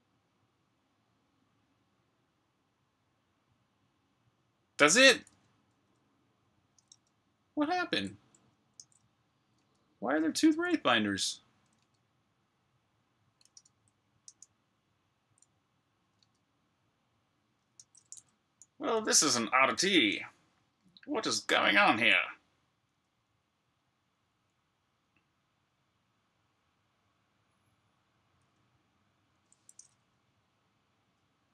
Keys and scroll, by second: 6.8 super+Tab, 8.7 super+q, 9.4 super+Tab, 13.5 shift+super+Tab, 14.1 super+q, 16.1 super+Tab, 17.7 shift+super+Tab, 19.1 alt+super+l.